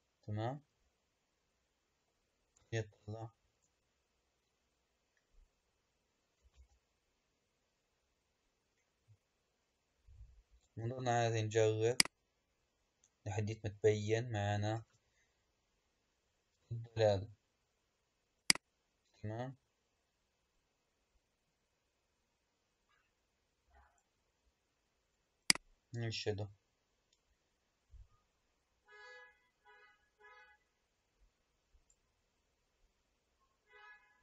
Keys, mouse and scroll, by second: 2.5 KP_0, 3.5 KP_0, 4.5-5.9 scroll up 2, 5.9-6.6 scroll down 1, 6.6 space, 12.0 click, 14.8 space, 18.3-21.4 drag, 25.3-28.4 drag.